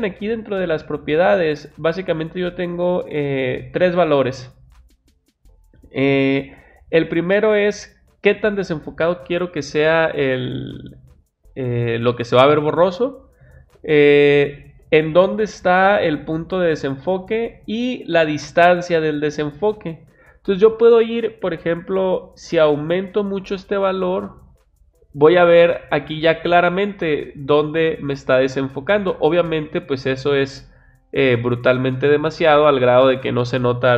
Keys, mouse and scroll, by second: 22.4-23.7 drag.